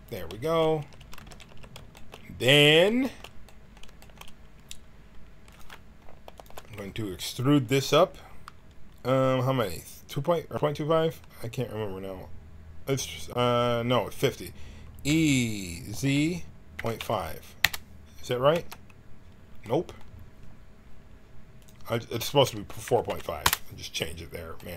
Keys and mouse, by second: 0.7 a, 0.9 a, 1.1 w, 1.4 a, 5.4-9.2 drag, 15.1 e, 18.5 n, 21.6-24.6 drag, 24.6-24.7 middle drag.